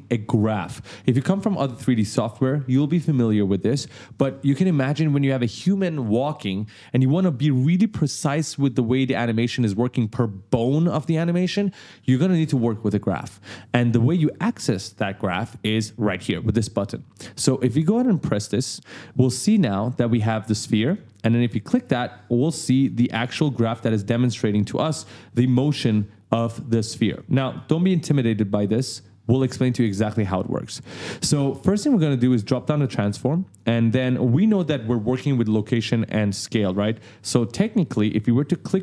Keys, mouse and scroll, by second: 18.1 click, 19.3 click, 20.8 click, 22.3 click, 23.4 right click, 27.1 right click, 32.8 click.